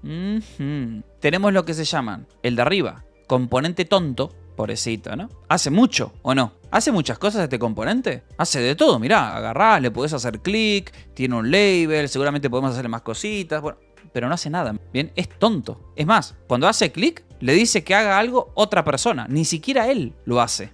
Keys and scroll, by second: 1.1 Escape, 2.2 k, 2.4 k, 3.2 g, 4.3 shift+g, 5.0 g, 5.4 Escape, 6.4 j, 7.3 Escape, 8.7 j, 9.7 Escape, 10.7 j, 11.5 Escape, 11.8 k, 16.7 e, 20.2-20.7 typing.